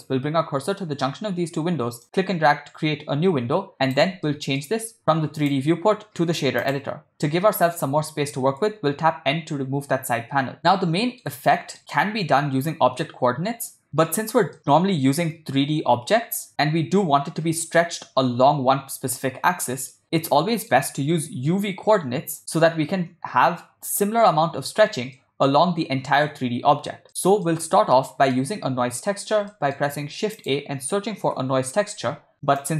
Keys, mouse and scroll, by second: 2.0-4.0 drag, 4.3-4.6 ctrl+middle drag, 5.4-6.8 drag, 9.2 n, 10.7 ctrl+middle click, 11.5 shift+middle click, 14.6-15.2 middle drag, 20.0-20.7 middle drag, 25.2 middle drag, 27.1 middle click, 27.6-28.4 middle drag, 29.0 middle click, 29.6 ctrl+middle click, 30.2 shift+a.